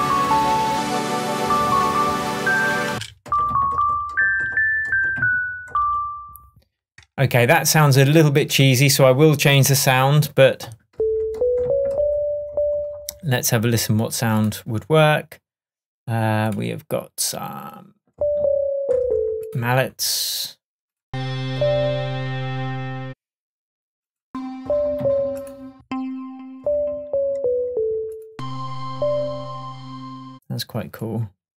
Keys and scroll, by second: 2.9 space, 8.2 shift+Tab.